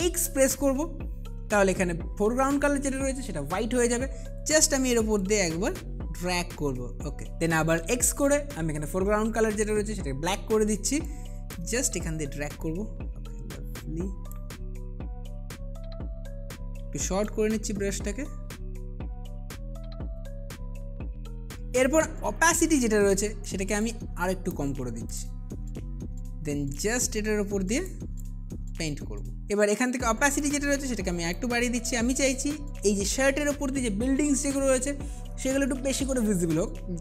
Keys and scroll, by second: 0.3 x, 8.1 x, 11.1 space, 15.9 space, 16.5 [, 17.0 [, 20.6 ], 20.8 ], 21.9 2, 29.4 ctrl+alt+z.